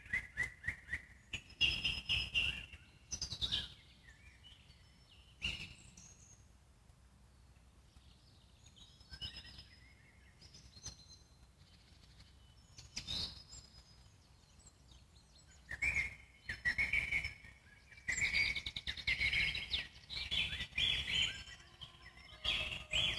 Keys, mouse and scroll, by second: 0.3 ctrl+Left, 0.6 middle click, 1.5 ctrl+Left, 1.7 middle click, 2.2 ctrl+Left, 2.4 middle click, 2.7-3.1 scroll up 1, 3.1 ctrl+Left, 3.2 middle click, 4.0 ctrl+Left, 4.2-5.4 middle drag, 5.4 ctrl+click, 5.9-7.3 middle drag, 7.3 ctrl+click, 7.7-8.3 scroll up 3, 8.3 ctrl+click, 9.1 ctrl+click, 9.3 middle click, 9.9 ctrl+click, 10.3 scroll up 5, 10.6-11.0 scroll down 18, 11.0-12.2 alt+middle drag, 12.2 `, 12.7 z, 12.9-14.1 scroll up 6, 14.1 g, 21.8 z, 21.9-22.9 scroll up 13, 22.9-23.1 scroll down 14.